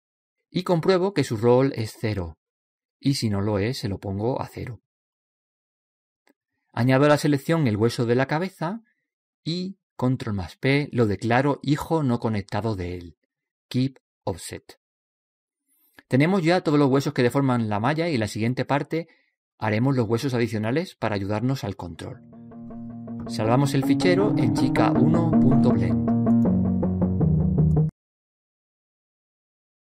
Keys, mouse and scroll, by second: 9.3 right click, 11.0 ctrl+p, 28.0 click.